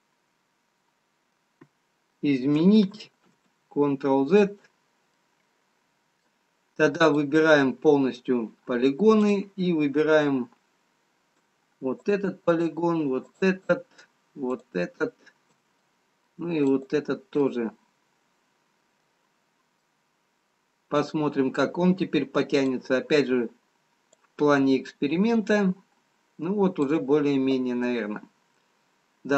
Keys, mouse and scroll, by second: 3.0 ctrl+z, 3.0-4.0 scroll down 1, 4.0 ctrl+z, 5.1 middle click, 8.2 click, 9.6 click, 12.1 shift+click, 13.6 shift+click, 15.7 middle click, 19.4-19.8 scroll down 1, 20.7 middle click, 24.1 click, 28.6 middle click.